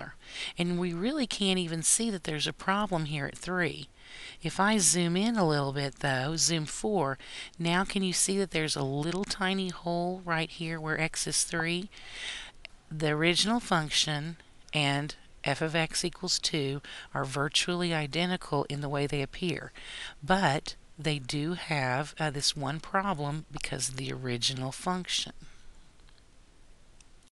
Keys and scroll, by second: 5.7 4.